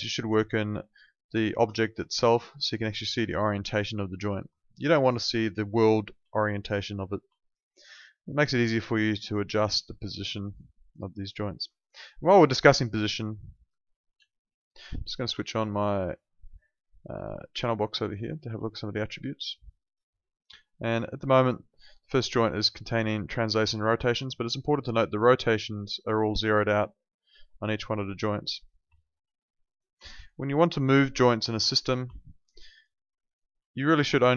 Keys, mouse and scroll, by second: 2.2 alt+click, 3.2 alt+middle click, 3.5 alt+right click, 3.8 alt+click, 4.6 alt+click, 5.0 alt+middle click, 5.1 alt+right click, 5.5 alt+middle click, 6.2 alt+click, 6.5 alt+right click, 7.4 alt+click, 7.7 alt+middle click, 7.8 alt+right click, 8.1 alt+click, 9.0 click, 9.6 alt+click, 11.8 alt+right click, 12.0 alt+middle click, 12.3 alt+right click, 12.5 alt+click, 14.2 space, 16.0 click, 18.8 click, 21.6 click, 26.2 alt+middle click, 26.9 click, 28.9 alt+middle click, 29.7 click, 30.1 alt+middle click, 30.3 alt+right click, 30.8 alt+click, 31.2 alt+middle click, 32.2 alt+middle click, 32.4 alt+right click, 32.7 alt+click, 33.0 alt+middle click, 33.2 alt+right click, 33.8 click, 34.2 alt+click.